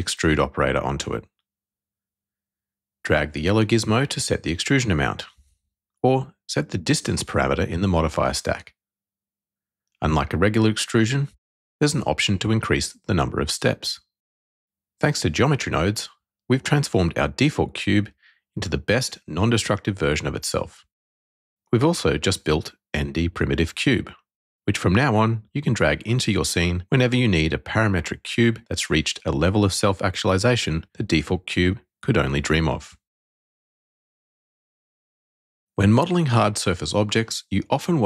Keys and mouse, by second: 1.6 click, 5.5-6.6 drag, 8.4-9.1 shift+drag, 11.1 click, 11.6 click, 17.5 ctrl+x, 18.4 click, 19.2 x, 21.1 click, 25.1-29.5 middle drag.